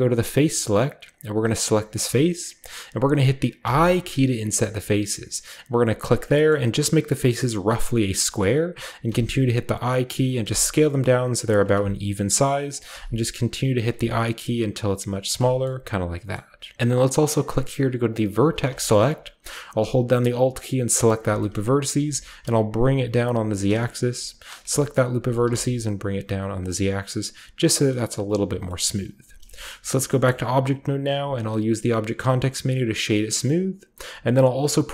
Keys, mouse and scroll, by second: 0.0 click, 1.3-3.5 middle drag, 1.3 scroll down 1, 2.8-3.3 scroll down 1, 3.5 i, 5.9 click, 6.2-8.0 scroll up 1, 6.2 middle click, 8.0-9.8 scroll down 1, 8.3-10.0 middle drag, 9.0 i, 10.2 click, 10.3 i, 11.5 click, 11.7 i, 12.7 click, 12.8 i, 13.7 click, 13.8 i, 15.2 click, 15.4-16.7 drag, 15.4-16.3 scroll down 1, 15.4 typing, 16.3 middle click, 16.3 scroll down 1, 16.3-16.7 scroll up 1, 18.3-21.0 drag, 18.7-21.0 shift+scroll up 1, 18.7 shift+middle click, 21.0-22.3 alt+right drag, 21.8 g, 22.0 z, 23.3-25.1 shift+drag, 25.1 g, 25.4 z, 26.5-28.5 shift+drag, 27.8 middle click, 28.5-30.0 scroll down 1, 28.8-29.4 middle drag, 29.1 Tab, 29.6 shift+middle click, 30.2-31.2 middle drag, 31.0 w, 32.2-34.3 drag.